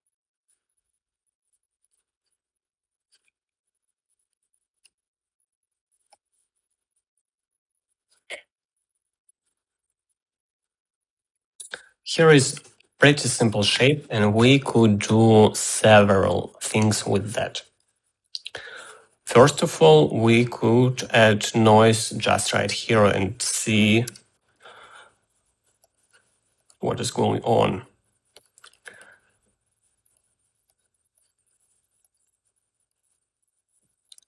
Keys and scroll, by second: 0.0-1.0 typing, 25.0-25.9 typing.